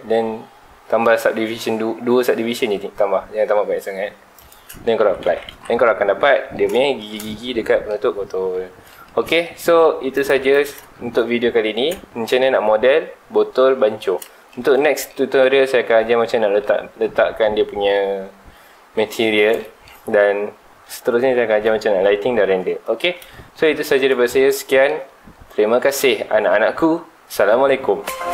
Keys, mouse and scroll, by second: 4.5 shift+click, 5.0 alt+a, 5.2 Tab, 5.5 alt+a, 5.7-6.2 scroll down 2, 6.2-7.4 middle drag, 7.4 scroll down 2, 7.6-8.1 middle drag, 8.1-8.7 scroll down 2, 8.7 scroll up 2, 8.9-10.1 shift+middle drag, 10.1 click, 10.3 x, 11.0-12.3 shift+middle drag, 12.3 scroll up 2, 12.5-14.2 middle drag, 14.2 scroll up 2, 14.2 scroll down 2, 14.4-14.8 shift+middle drag, 14.8 scroll down 2, 15.1-16.0 middle drag, 16.0-16.3 scroll down 3, 16.3-19.5 shift+middle drag, 19.6-20.1 shift+middle drag, 20.1 scroll up 1, 21.6-22.0 scroll down 2, 22.0-23.6 middle drag, 23.6-24.5 scroll up 2, 24.5-27.6 shift+middle drag.